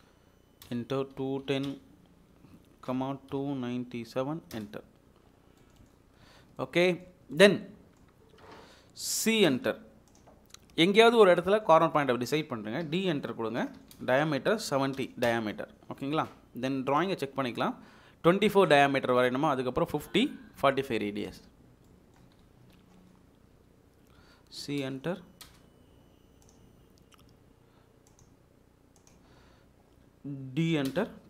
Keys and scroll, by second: 0.7 Return, 1.2-1.9 typing, 3.0-4.1 typing, 4.5 Return, 9.3 c, 9.5 space, 12.8-14.9 typing, 15.3 Return, 16.9 typing, 23.5 d, 24.2 Escape, 25.5 space, 30.7-31.2 typing.